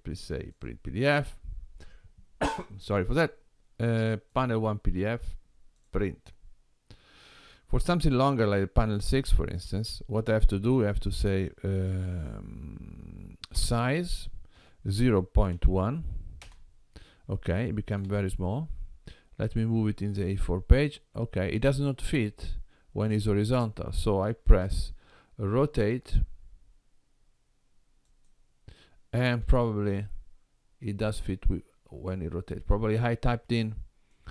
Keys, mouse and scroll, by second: 0.5 click, 8.9 click, 13.6 s, 18.1 g, 22.2-24.3 scroll up 3, 24.3 r, 29.4 g.